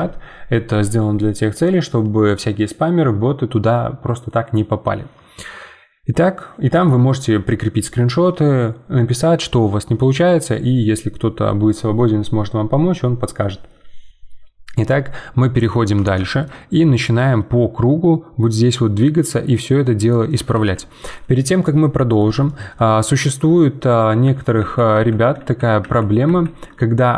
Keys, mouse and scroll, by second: 14.9 middle click, 15.7 Tab, 16.2 shift+middle click, 16.9 click, 17.4 scroll down 2, 17.8-20.5 middle drag, 20.5 ctrl+z, 21.6-23.3 middle drag, 23.3 scroll up 2, 24.1 ctrl+z, 24.6 ctrl+z, 24.9 ctrl+z.